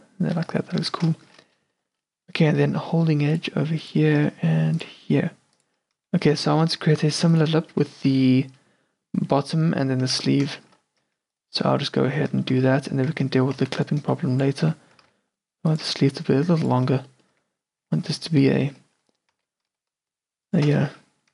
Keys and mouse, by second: 0.5 Tab, 0.9 q, 1.3 middle click, 2.6 ctrl+r, 4.3 ctrl+r, 6.1 Tab, 6.7 a, 6.9-7.8 middle drag, 10.3 Tab, 11.1 Tab, 12.2 Tab, 13.2 a, 13.7 z, 14.7 z, 15.0 g, 15.9 s, 17.4 q, 17.9 q, 19.4 s, 20.9 q.